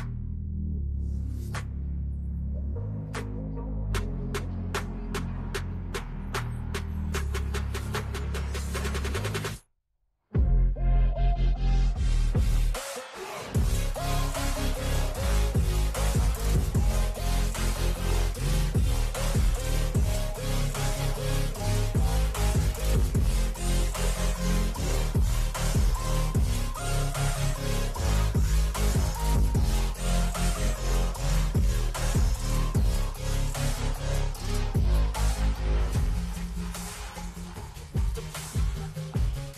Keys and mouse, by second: 0.7 click, 1.7 click, 3.3-5.0 drag, 5.5 ctrl+a, 6.1 g, 6.5 l, 7.4 click, 9.0 click, 9.9 click, 12.6 Left, 12.8 Left, 13.2 Left, 13.8 Left, 14.3 Down, 14.8 Right, 17.3 click, 18.1 KP_8, 18.6 KP_0, 19.2 KP_Enter, 20.7 Down, 20.9 Down, 21.1 Down, 21.4 Down, 21.6 Down, 21.8 Down, 22.2 Down, 22.6 Down, 26.9 click, 29.5 Down, 29.7 Down, 29.8 Down, 30.2 Down, 30.6 Down, 31.1 Down, 33.0 click, 34.4 Return, 34.8 Right, 35.4 Right, 35.8 Right, 36.0 Right, 36.4 click, 37.4 Down, 37.5 Down, 37.7 Down, 38.6 click, 38.9 Down, 39.1 Down.